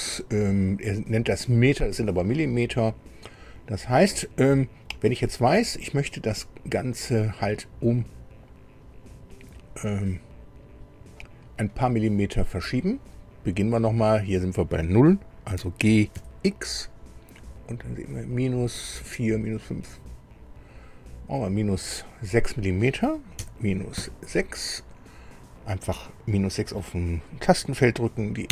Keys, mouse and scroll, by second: 16.2 x, 23.3 KP_Subtract, 23.9 KP_6, 28.4 KP_Enter.